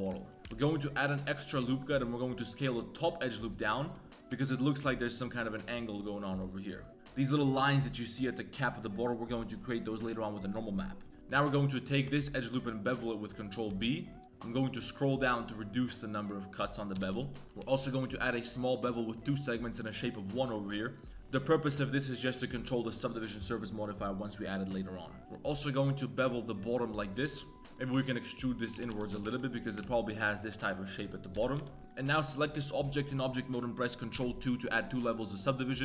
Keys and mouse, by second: 0.1 shift+middle click, 0.4 ctrl+r, 1.7 alt+click, 2.3 s, 4.1 s, 4.3 shift+middle click, 11.1 ctrl+b, 11.1 z, 11.3 z, 12.1 alt+click, 12.8 ctrl+b, 16.9 KP_3, 17.1 z, 17.5 Tab, 17.6 ctrl+b, 19.8 right click, 20.7 2, 20.7 middle click, 21.1 middle click, 21.2 1, 21.5 2, 22.5 Tab, 22.7 middle click, 25.2 ctrl+b, 27.6-29.8 typing, 27.6 click, 30.7 Tab, 31.3 KP_3, 31.5 z, 31.8 Tab, 31.9 click, 32.2 click, 34.1 ctrl+2.